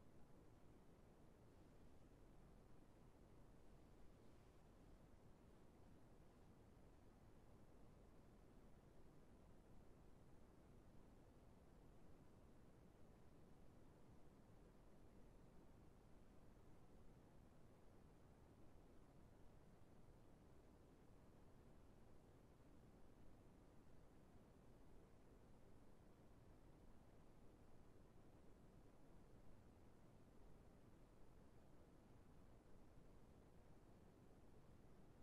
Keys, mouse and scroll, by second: 3.9 scroll down 1, 4.4 right click, 5.1-5.5 scroll down 1.